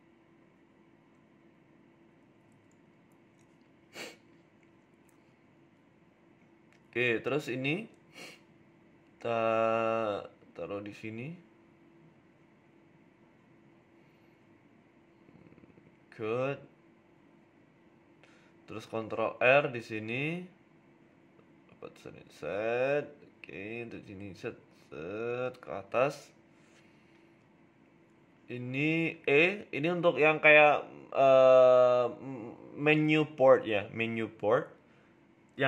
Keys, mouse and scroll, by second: 5.3 KP_3, 6.1 shift+middle click, 6.4 shift+a, 8.9 g, 10.1 shift+middle click, 10.5 s, 13.7 KP_1, 14.4 s, 15.0 s, 17.3 s, 18.3-18.8 scroll up 3, 18.6 shift+middle click, 18.9 Tab, 19.6 ctrl+r, 21.0 ctrl+z, 21.4 ctrl+r, 22.2 s, 25.3 ctrl+r, 26.1 s, 29.3 click, 30.0 shift+click, 30.6 e, 32.7 middle click, 33.0 scroll up 3, 33.2 shift+middle click, 34.4 click, 35.1 right click, 35.3 middle click.